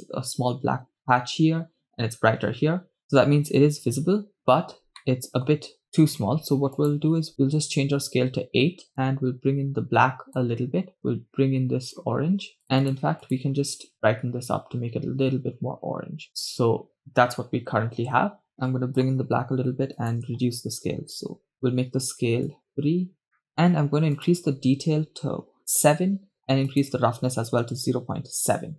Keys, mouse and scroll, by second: 3.6-5.0 drag, 5.0 middle click, 6.8 click, 8.9-10.5 drag, 11.0 click, 12.7 click, 14.3 click, 18.5 click, 20.1-21.6 drag, 22.5 click, 23.4 middle click, 23.6 scroll up 2, 24.2-26.4 drag, 26.7-28.7 drag.